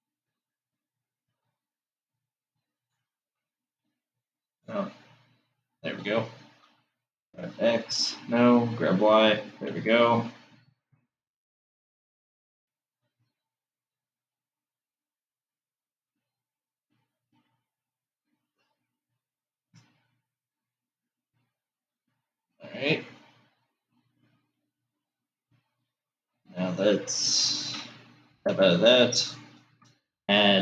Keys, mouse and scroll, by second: 3.1 click, 4.8 click, 7.1 g, 18.2-19.0 scroll down 4, 28.4 Tab, 30.0 shift+a.